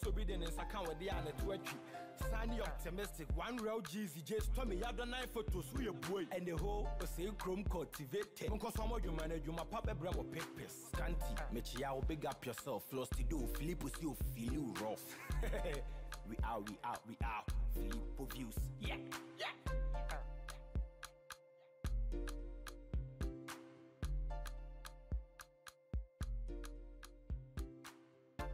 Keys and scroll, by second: 0.3 Return, 1.6 ctrl+=, 16.4 Return.